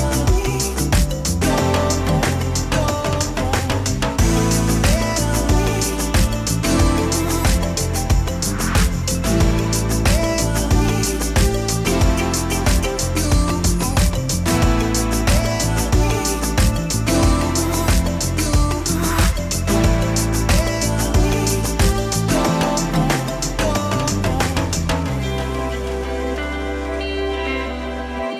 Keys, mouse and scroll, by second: 0.8 alt+h, 2.2-4.5 middle drag, 4.5 f, 4.8-6.7 drag, 6.8-8.1 middle drag, 8.1 click, 8.5-10.9 middle drag, 11.0-12.2 drag, 11.9 f, 12.4-13.8 middle drag, 13.8-15.4 drag, 13.8 f, 15.2 middle click, 16.4 f, 16.5 click, 18.0-19.2 middle drag, 19.2-21.8 drag, 20.4 f, 21.6 middle click, 22.3-23.9 drag, 23.9-24.9 middle drag, 25.2 click, 25.2 f, 26.3 f, 27.3-28.3 middle drag.